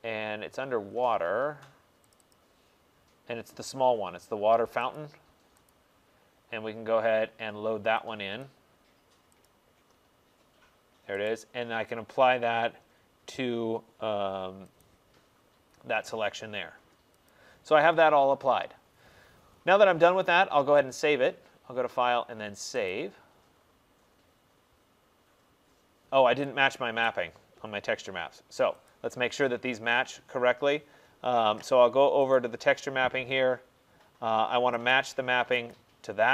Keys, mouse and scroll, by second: 0.9 middle click, 2.2 click, 2.4 click, 4.8 click, 5.0 click, 5.7 click, 8.5 click, 9.5 click, 11.4 right click, 14.9 click, 17.4 click, 21.0 click, 23.0 click, 27.1 right click, 28.9 click, 32.4 click, 35.0 click, 35.8 click.